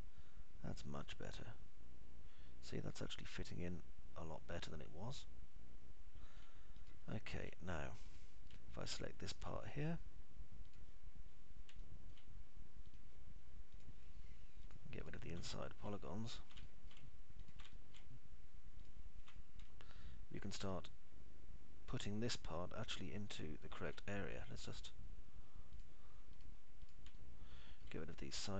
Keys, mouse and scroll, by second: 0.0-7.7 alt+middle drag, 8.3 alt+middle click, 10.0 alt+middle click, 13.2 alt+middle click, 16.8 alt+middle click, 18.0 alt+middle click, 19.0 alt+middle click, 21.0 Delete, 22.0-25.2 alt+middle drag.